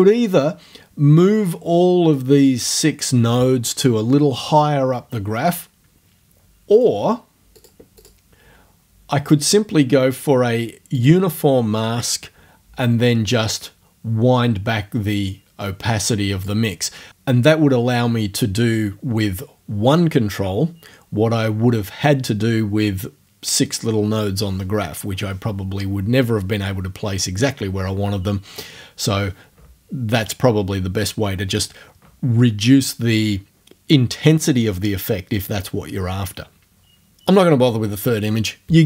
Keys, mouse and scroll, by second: 6.8 click, 7.6 click, 8.0 click, 8.4-11.0 middle drag, 11.0 click, 11.2-13.4 middle drag, 13.4-16.6 drag, 16.6-18.4 middle drag.